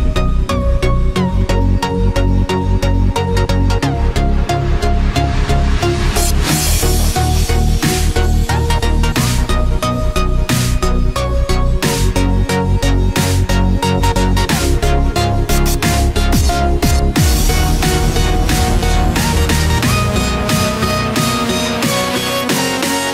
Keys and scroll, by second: 7.0 ctrl+z, 11.2 Left, 11.5 ctrl+-, 12.4 ctrl+z, 13.2 ctrl+=, 14.5 ctrl+z, 18.9 ctrl+-, 19.7 ctrl+z, 20.5 ctrl+=, 21.5 ctrl+z.